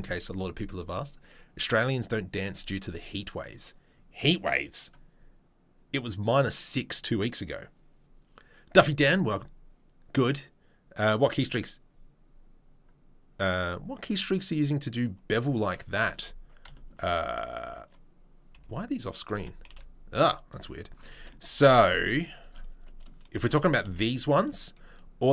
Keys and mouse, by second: 16.2 Tab, 18.5 n, 19.3 n, 21.5 click, 21.6 middle click, 21.8 Tab, 22.4 click, 22.7-25.3 middle drag.